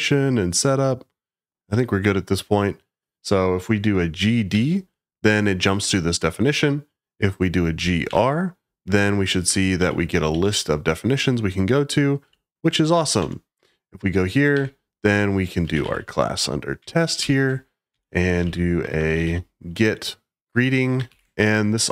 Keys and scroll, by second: 4.2 g, 4.5 d, 7.7 g, 8.0 r, 9.7 Up, 10.3 Up, 13.1 Return, 14.5-16.3 typing, 17.2 ctrl+y, 17.6-19.7 typing, 21.1 ctrl+y.